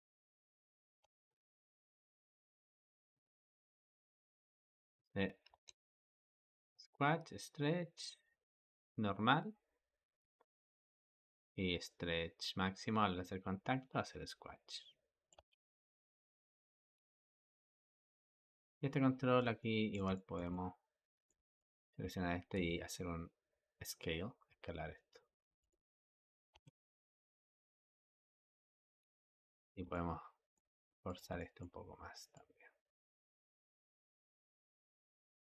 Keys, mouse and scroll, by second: 0.9 space, 3.0 click, 4.4 click, 5.4 Escape, 5.8-8.9 drag, 15.2 space, 16.7 Escape, 17.9 click, 18.3 click, 19.0-19.4 scroll down 4, 19.4-21.4 ctrl+middle drag, 21.4 click, 22.4 s, 26.4 space, 28.9 Escape, 29.3-30.9 shift+middle drag, 30.9 click, 31.2-32.2 shift+middle drag, 32.2 click, 34.2 shift+middle click, 34.8 click.